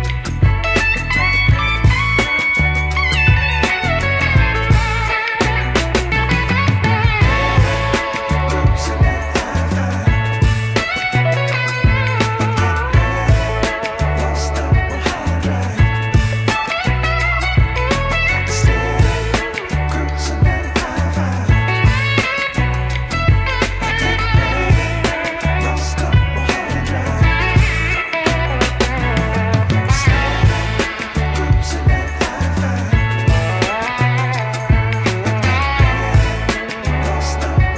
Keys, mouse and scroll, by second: 1.0 g, 3.9 Tab, 4.9 g, 9.0-9.7 scroll down 2, 10.3-10.8 scroll down 6, 10.8-12.0 scroll up 6, 12.3-13.5 drag, 13.8-14.5 scroll up 4, 14.5 g, 17.9 click, 18.4-19.1 middle drag, 19.3-19.9 scroll down 3, 19.7 click, 22.5-24.0 scroll up 1, 24.4 drag, 25.2 click, 25.9-26.9 drag, 27.4 drag, 27.6 Tab, 28.1 Tab, 28.5-29.6 right drag, 30.1 click, 30.5 click, 31.1 right click, 31.5-32.0 drag, 32.6 click, 32.9-33.8 scroll down 1, 33.8 drag, 33.8 scroll down 1, 34.2 click, 34.8-35.2 scroll up 1, 35.2 middle drag, 35.6-37.6 middle drag.